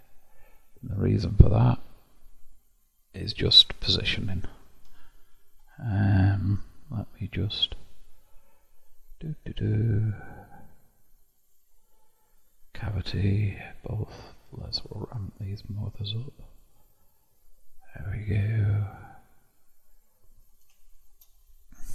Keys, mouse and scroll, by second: 3.8 click, 4.9 KP_7, 5.5-7.7 scroll up 2, 7.7-10.1 drag, 11.4-17.8 drag, 19.0-21.4 middle drag, 21.4-21.7 scroll up 1.